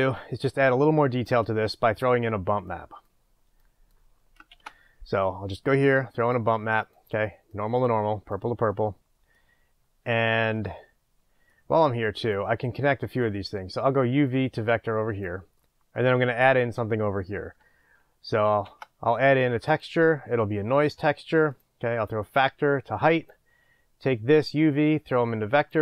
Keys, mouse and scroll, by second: 6.3 shift+a, 8.7-12.6 middle drag, 9.8-11.2 scroll down 2, 11.2-12.6 scroll down 1, 12.6-15.2 drag, 15.6 middle click, 20.8 shift+a, 22.3 click, 24.5 drag.